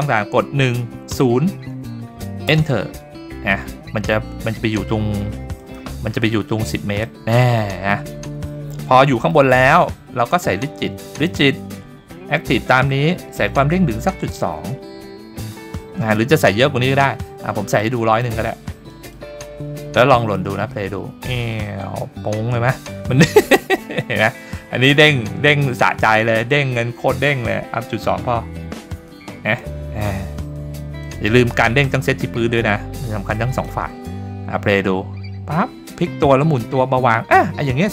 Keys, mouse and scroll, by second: 6.0 middle click, 6.0-7.6 scroll down 5, 7.6 middle drag, 8.1 scroll up 1, 9.0 shift+middle drag, 9.6 scroll down 1, 11.1 click, 12.5-13.7 scroll down 2, 13.7-15.5 drag, 13.7 scroll down 1, 16.1 middle click, 17.8 click, 18.9-20.6 drag, 26.0 click, 27.2-29.6 drag, 31.0 click, 33.5 click, 34.7-36.5 scroll up 2, 37.8-37.9 shift+middle drag.